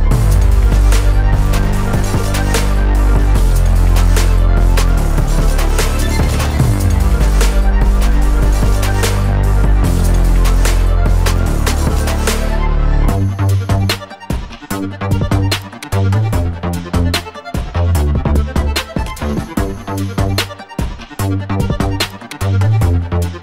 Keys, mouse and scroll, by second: 1.9 click, 2.4 click, 3.9 drag, 4.9 drag, 5.9 click, 6.8-7.2 scroll down 2, 7.5 scroll down 2, 8.4 click, 9.7 scroll down 1, 10.8-11.5 scroll down 9, 14.4 drag, 15.3-20.3 drag, 21.4-22.8 middle drag, 23.0-23.4 scroll up 1.